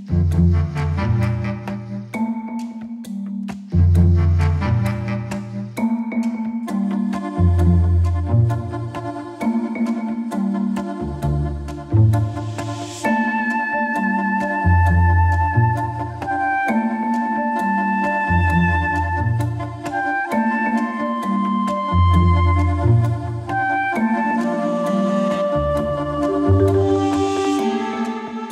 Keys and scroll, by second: 18.6 ctrl+z, 27.4 ctrl+z.